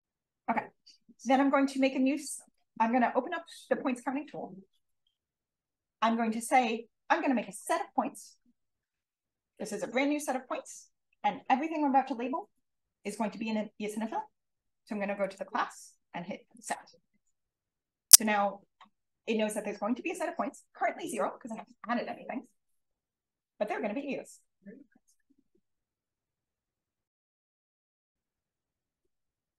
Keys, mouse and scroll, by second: 0.0 Return, 2.4 click, 8.8 click, 9.4 click, 10.5 click, 15.2-16.6 drag.